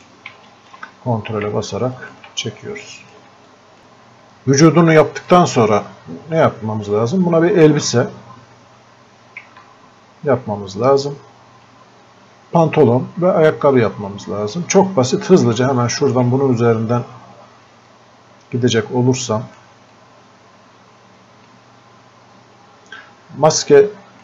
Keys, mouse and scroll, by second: 5.2 click, 5.3-8.3 alt+drag, 9.5 alt+click, 9.7-14.1 alt+drag, 14.1 alt+click, 15.1-15.6 scroll up 1, 15.7-17.9 alt+drag, 17.9-19.3 drag, 19.3-23.5 drag, 23.5-24.2 ctrl+drag.